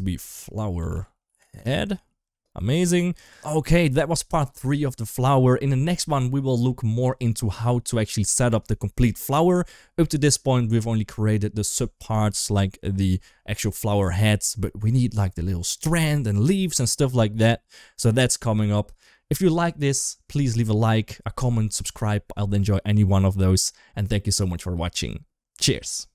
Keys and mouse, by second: 2.8 ctrl+s.